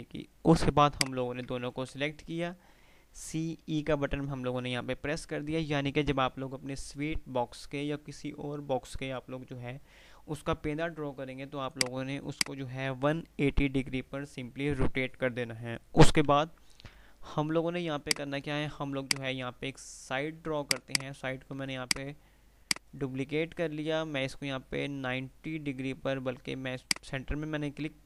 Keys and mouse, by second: 0.9 shift+click, 1.7 typing, 11.9 click, 11.9 typing, 16.6 F3, 19.3 F2, 20.7 click, 22.7-25.9 right drag, 26.9 click.